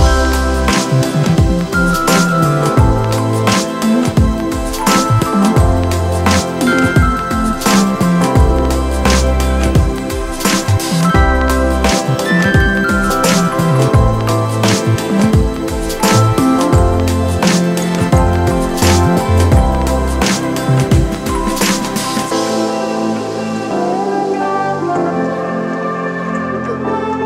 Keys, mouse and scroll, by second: 23.3 ctrl+d.